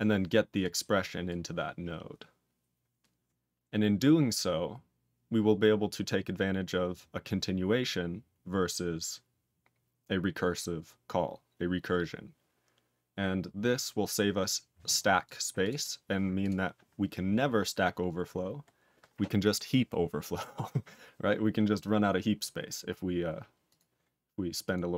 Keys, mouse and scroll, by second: 0.6 click, 1.2 click, 15.2 click, 15.6 click, 15.7 double click, 16.4 click, 18.7-19.3 scroll up 1, 19.3-20.9 scroll up 1, 22.9-23.6 scroll up 1, 23.6 click, 24.6 click.